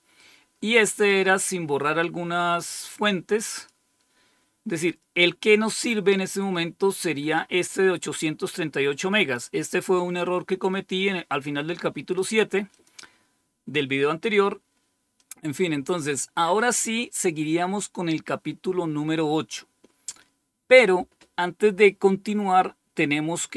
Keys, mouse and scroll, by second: 1.0-3.6 drag, 5.8-7.3 drag, 9.3-12.1 drag, 12.6 click, 15.1 click.